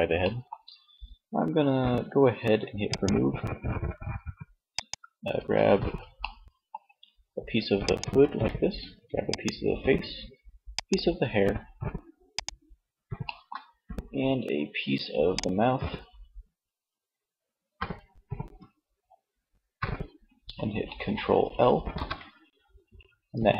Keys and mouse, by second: 3.5 middle click, 5.3 middle click, 13.1 middle click, 16.9 middle click, 17.2-19.3 middle drag, 21.4 ctrl+l, 23.4 z.